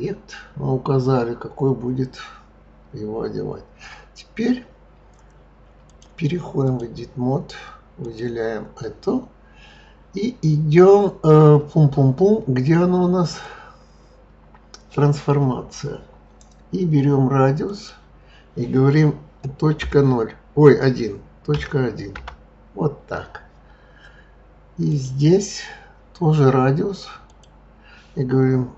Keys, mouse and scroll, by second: 5.8-8.1 drag, 13.2 click, 17.6-20.7 drag, 24.9 click, 27.3-28.7 drag.